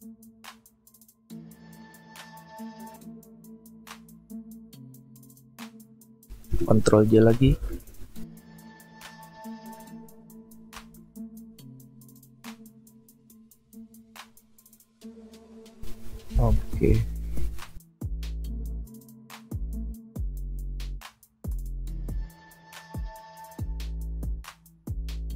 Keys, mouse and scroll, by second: 0.6 alt+scroll up 1, 7.5 ctrl+j, 9.0-10.1 alt+scroll down 1, 10.7 ctrl+t, 16.3 ctrl+t, 17.2 shift+click, 22.5 Return.